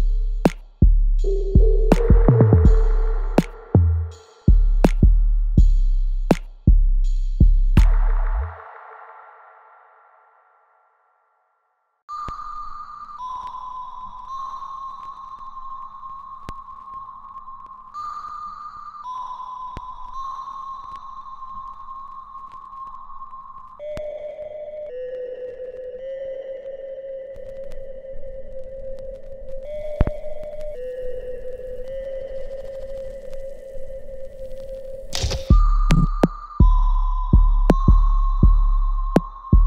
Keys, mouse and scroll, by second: 1.5 alt+right click, 1.8 alt+click, 2.3 alt+middle click, 2.8 alt+right click, 3.9 shift+click, 6.6 alt+right click, 7.1 alt+click, 8.1 alt+middle click, 8.6 alt+right click, 9.0 alt+click, 10.2 click, 11.4 alt+right click, 11.4 alt+right click, 13.1 click, 14.2 click, 15.4-17.1 ctrl+drag, 17.1 alt+click, 17.5 alt+middle click, 17.9 alt+right click, 18.7 alt+click, 19.6-21.9 alt+drag, 21.9-23.7 ctrl+drag, 23.7 right click, 24.2 click, 24.4 alt+right click, 25.0-26.6 alt+drag, 26.6 alt+right click, 27.1-28.4 alt+drag, 28.1 middle click, 28.9 alt+click, 30.7 alt+right click, 31.3 click, 31.6-33.1 drag, 33.1 alt+right click, 33.9 alt+middle click, 34.3 alt+click, 35.3 ctrl+s, 35.6 click, 35.9 alt+middle click, 36.3 alt+click, 36.9 alt+middle click, 37.5-39.6 alt+drag.